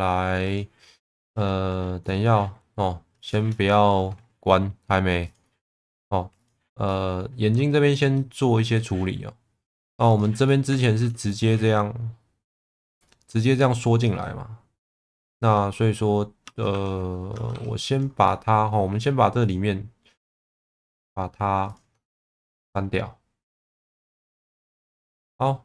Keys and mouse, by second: 0.5 click, 1.0 middle click, 1.3 Tab, 2.0 middle click, 3.2 click, 3.7 shift+middle click, 5.3 click, 6.4 click, 6.9 middle click, 8.1 middle click, 10.1 click, 10.5 middle click, 11.3 shift+middle click, 12.6 click, 14.2-15.7 middle drag, 16.4 Tab, 16.7 3, 17.3 Tab, 17.5 3, 18.3 middle click, 19.5 ctrl+click, 20.4 ctrl+click, 22.5 x.